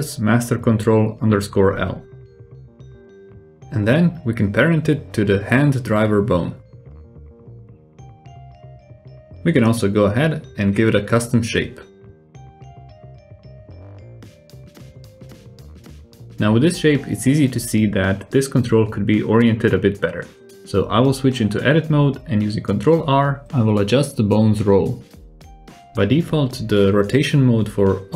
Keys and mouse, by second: 3.6 shift+click, 4.3 alt+z, 5.9 ctrl+p, 11.1-13.5 drag, 14.0 click, 15.0 drag, 15.2 middle click, 15.4 alt+z, 15.8-16.3 drag, 16.3-18.2 middle drag, 18.4-18.7 shift+middle drag, 19.4 Tab, 19.7 alt+z, 20.3 middle click, 20.9 ctrl+r, 22.3 Tab, 22.7-23.7 drag, 23.9 Tab, 24.1 ctrl+r, 25.1 Tab, 25.4-26.1 drag, 26.1 alt+z, 26.6 Tab, 26.8 alt+z, 27.1 Tab, 27.4-28.1 drag.